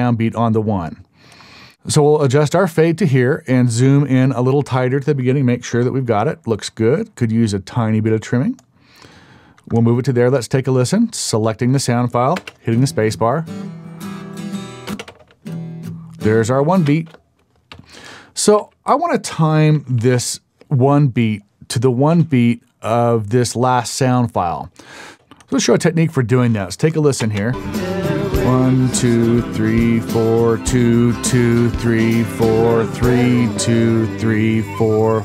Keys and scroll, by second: 12.3 space, 14.9 space, 15.1 space, 16.8 space, 17.7 Up, 18.6 Up, 20.0 Up, 25.1 space, 27.2 space.